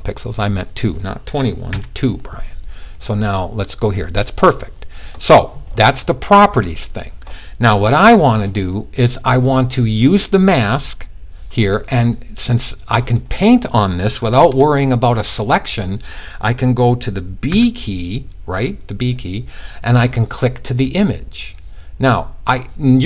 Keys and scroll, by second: 1.2 2, 17.1 b.